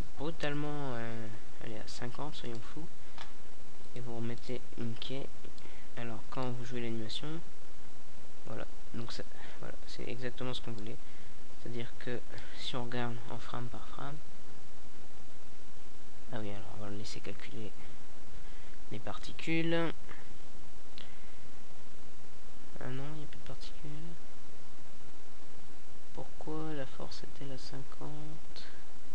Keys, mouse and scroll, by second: 2.0 Right, 2.6 Right, 3.4 Right, 3.9 Right, 4.4 Right, 5.2 Right, 6.0 alt+a, 18.3 alt+a.